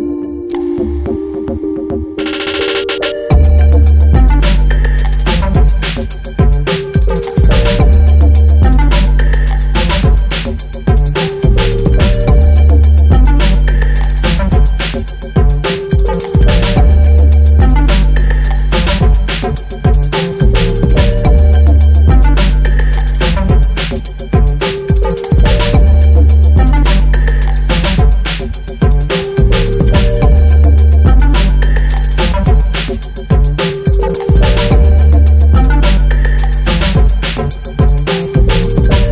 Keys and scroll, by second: 2.1 ctrl+j, 17.2 ctrl+t.